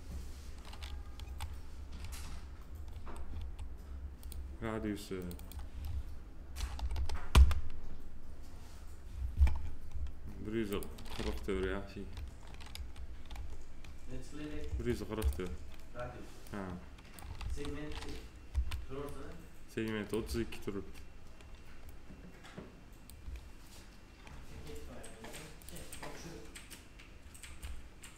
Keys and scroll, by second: 1.1 F4, 6.5 1, 7.2 Return, 11.4 p, 14.6 F4, 17.3 ctrl+z, 18.4 F7.